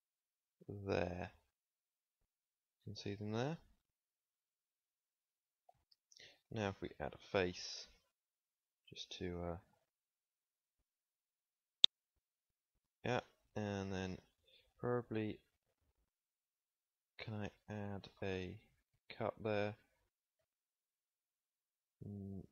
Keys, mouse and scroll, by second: 2.9 z, 4.0 middle click, 4.8 middle click, 5.0 middle click, 6.6 f, 9.7 middle click, 10.7-12.3 middle drag, 16.4 middle click, 20.3 ctrl+r.